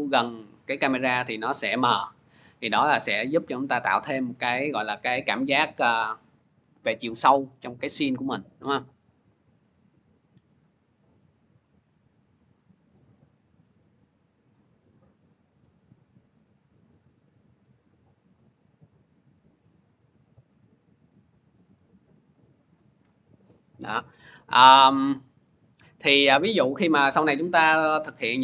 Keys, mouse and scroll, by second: 4.2 click, 6.5-7.2 scroll, 14.3 click, 14.8-15.2 scroll, 22.6 click, 24.1 scroll, 25.3 click, 25.3 scroll.